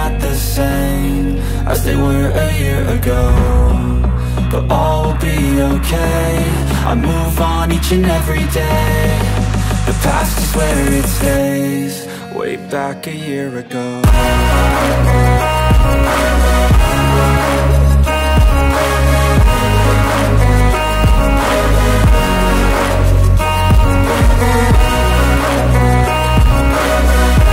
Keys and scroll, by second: 1.1 space, 4.5 m, 6.5 Return, 8.0 1, 8.4 Return, 9.1 p, 10.6 space, 13.3 Return, 14.5 1, 14.9 Return, 15.7 p, 17.1 space, 20.4 Return, 22.2 Return, 22.5 space, 22.9 p, 24.3 space, 25.2 m, 27.0 Return.